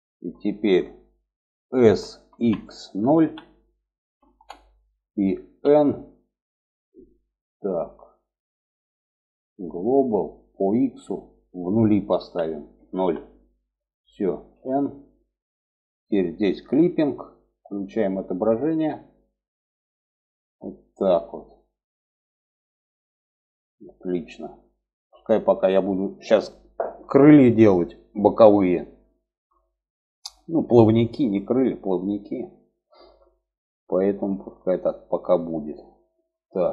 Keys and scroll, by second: 1.0 s, 4.9 n, 13.8 n.